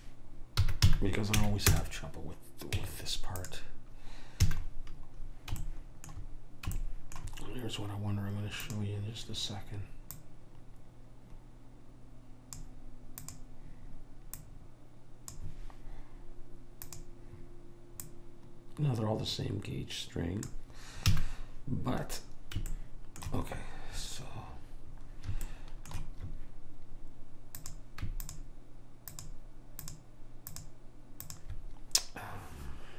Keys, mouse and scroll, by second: 0.7 s, 2.9 Tab, 4.6 a, 8.7-12.1 drag, 13.3-16.4 drag, 17.0-20.0 drag, 21.3 a, 25.6 middle click, 27.7-32.9 drag.